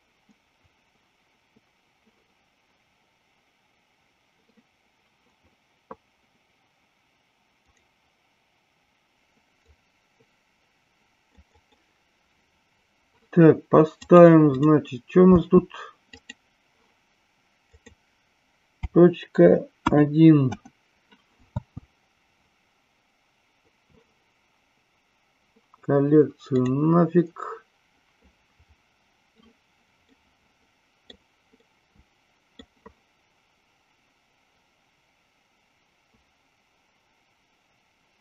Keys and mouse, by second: 7.6 click, 9.6-11.4 drag, 11.5-14.2 drag, 14.5 click, 15.4 space, 16.0 click, 17.8-20.9 drag, 21.5 space, 26.6 click, 30.0-31.2 middle drag, 31.6-32.6 middle drag.